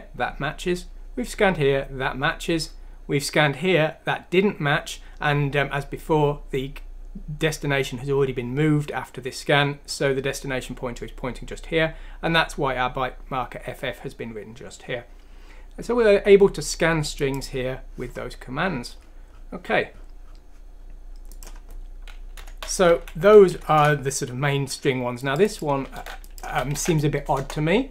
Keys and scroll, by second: 22.4 Home, 22.9 ;, 26.0 ctrl+c, 26.5 ctrl+f, 26.8 v, 27.4 Return.